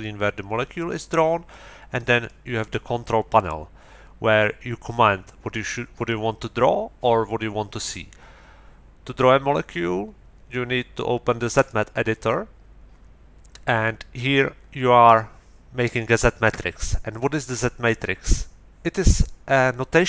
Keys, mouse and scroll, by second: 2.2 middle click, 11.5 click.